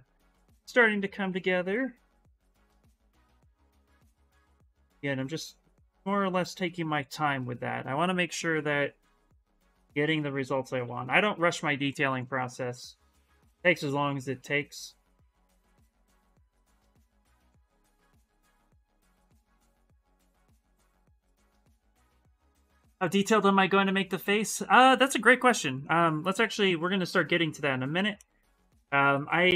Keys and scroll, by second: 2.2-3.3 typing, 10.2 s, 12.3 s, 19.5 s, 28.4 s.